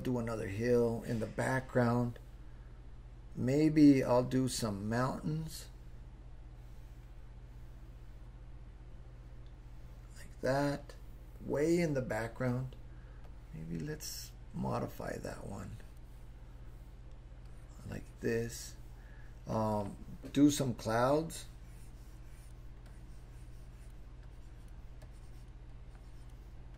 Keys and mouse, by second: 3.6-10.5 drag, 13.2-16.0 drag, 17.5 click, 21.2-22.5 drag, 22.9-23.9 drag, 24.3 click, 25.0 click, 25.7 click.